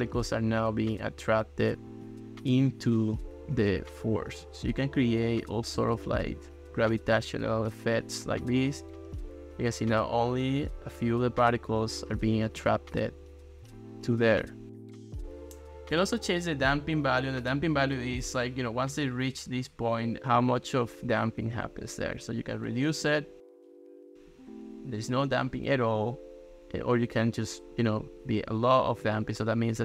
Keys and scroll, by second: 21.2 ctrl+s, 22.2 ctrl+x.